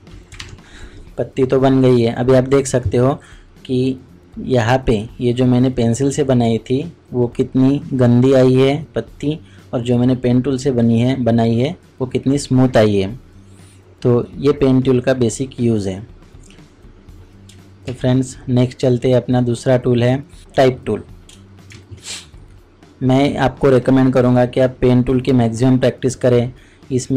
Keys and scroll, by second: 17.8 ctrl+Tab, 21.7 ctrl+shift+Tab.